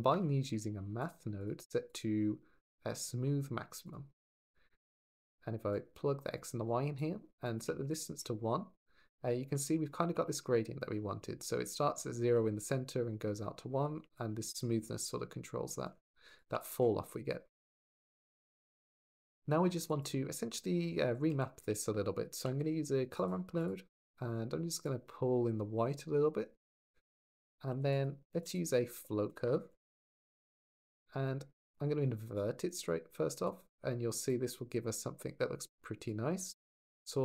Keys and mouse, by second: 1.7-3.7 drag, 4.7 click, 5.5 drag, 6.5 click, 7.2 click, 14.1-15.7 shift+middle drag, 16.2 click, 18.6 click, 19.6 shift+a, 23.4 click, 24.6-26.4 drag, 27.5 g, 27.7 click, 28.1 shift+a, 30.5 click, 32.3 click, 33.3 click, 35.9-37.2 drag.